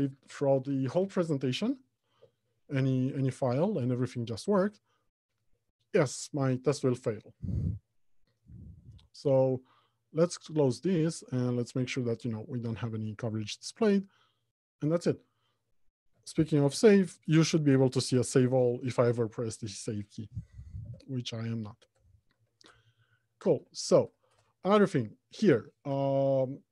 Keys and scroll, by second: 16.9 ctrl+s, 21.0 alt+Home, 21.5 Left, 22.3 Return.